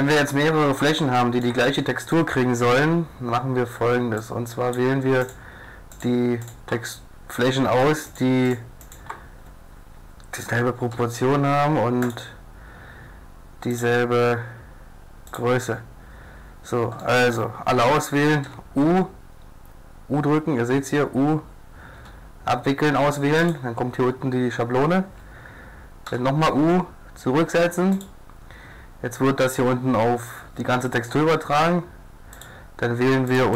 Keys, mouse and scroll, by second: 0.1 middle click, 0.4 middle click, 1.1 middle click, 1.9 middle click, 4.4 click, 4.8 click, 5.2 right click, 6.0-7.4 drag, 7.7 click, 7.8-10.8 drag, 10.9 u, 13.7-14.3 drag, 15.3 click, 15.6-17.0 middle drag, 17.2 middle click, 17.2-18.6 drag, 18.4 u, 22.0 u, 26.1 u, 31.7 middle click, 32.4 click, 33.3 click.